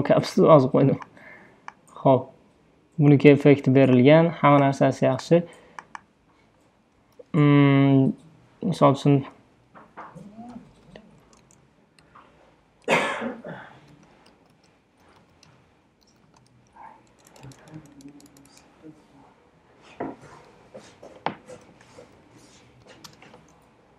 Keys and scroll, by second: 10.7-17.1 typing, 21.4-23.1 typing.